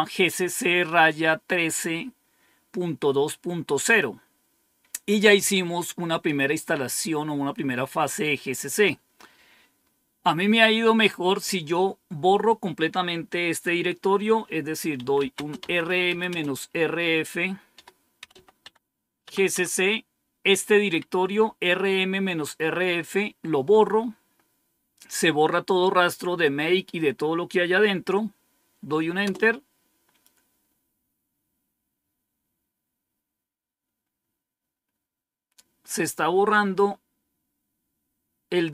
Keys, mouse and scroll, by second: 3.8 click, 8.5-9.1 scroll down 1, 9.1-14.9 scroll down 1, 14.6-19.4 typing, 19.1 Tab, 29.1 Return.